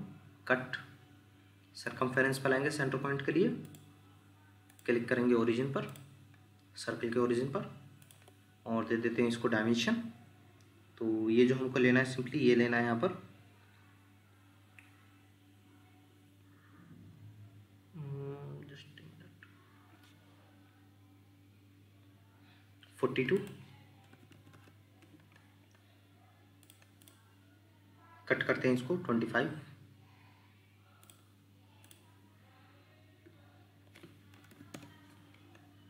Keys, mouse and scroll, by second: 24.1 4, 24.5 Return, 27.0 double click, 34.3-34.7 typing, 34.7 Return.